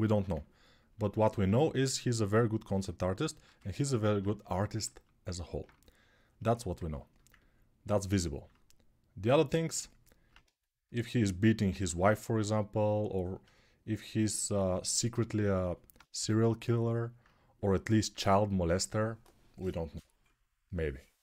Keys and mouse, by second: 15.1-21.2 ctrl+alt+drag, 15.9 g.